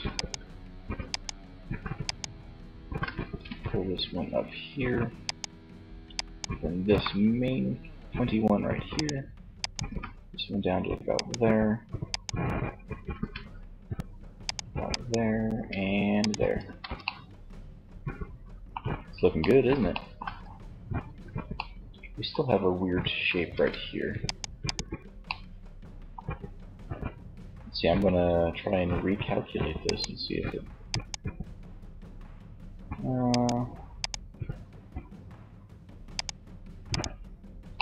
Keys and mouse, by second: 2.4 g, 6.0 g, 8.4 click, 9.0 g, 10.1 right click, 11.2-12.9 drag, 12.3 g, 13.7 click, 14.1-15.2 middle drag, 14.7 g, 15.2 click, 15.4 middle click, 15.6 z, 15.8-17.1 drag, 22.5 ctrl+Tab, 28.9-31.7 drag, 35.2-37.8 drag, 37.3 ctrl+Tab.